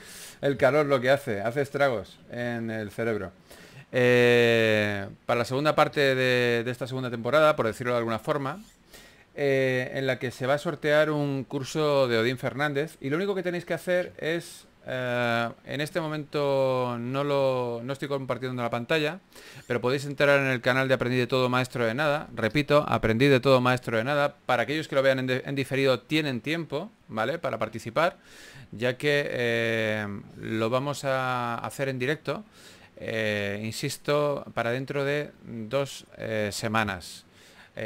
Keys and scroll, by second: 1.2 4, 3.7 4, 5.5 typing, 8.1-9.1 typing, 10.5 typing.